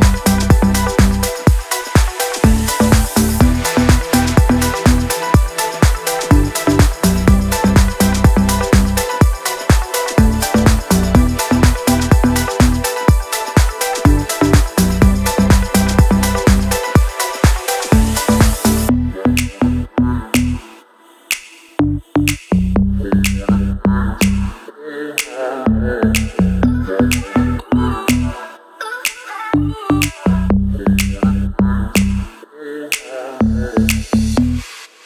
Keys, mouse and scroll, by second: 3.0-4.0 drag, 12.4 click, 13.7-14.7 shift+drag, 21.5 click, 24.5 click, 29.6-34.6 alt+drag.